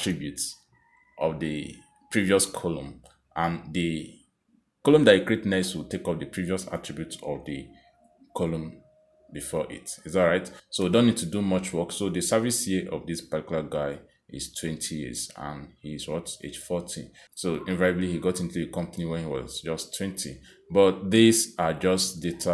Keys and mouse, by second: 0.3 click, 4.8 click, 5.7 click, 6.7 click, 7.7 click, 8.6 click, 9.7 click, 10.3 click, 11.6 click, 12.6 click, 13.5 click, 14.3 click, 15.3 click, 16.8 click, 20.5 click.